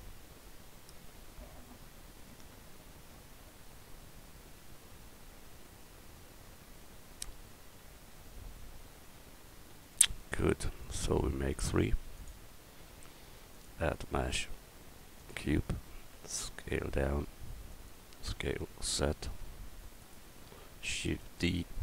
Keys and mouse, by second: 6.1 middle click, 12.2-12.6 middle drag, 15.7 s, 18.2 s, 21.1 shift+d.